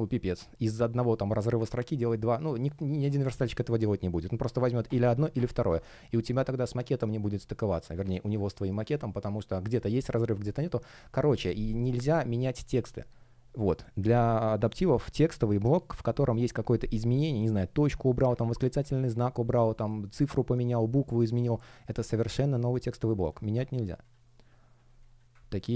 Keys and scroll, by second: 24.8 space.